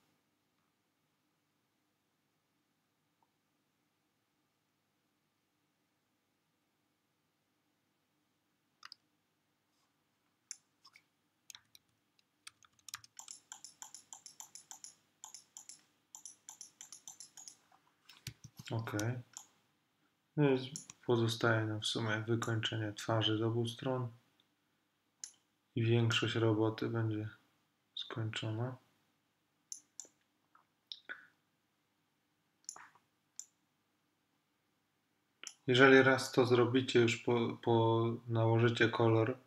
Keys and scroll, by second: 11.6 ], 18.5 space.